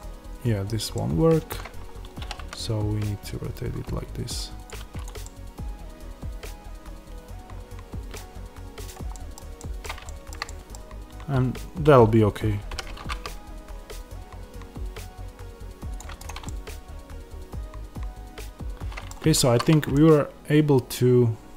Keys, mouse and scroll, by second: 1.9 scroll, 2.1 r, 4.6 click, 5.1 middle click, 8.8 click, 9.1 middle click, 10.0 shift+middle click, 10.4 middle click, 12.7 g, 15.9 click, 16.4 middle click.